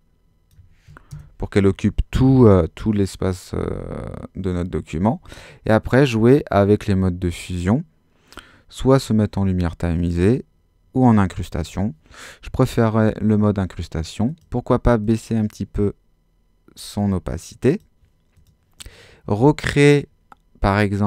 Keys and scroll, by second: 19.2 Escape.